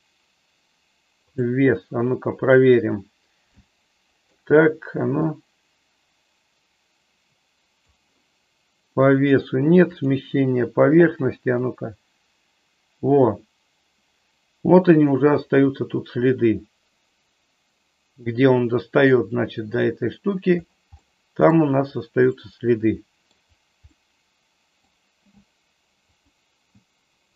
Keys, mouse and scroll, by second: 3.7 shift+middle click, 5.3-7.9 drag, 9.2 click, 11.7-19.9 drag, 21.1-21.6 middle drag, 22.4-23.4 middle drag, 24.1-25.0 middle drag, 26.2 click.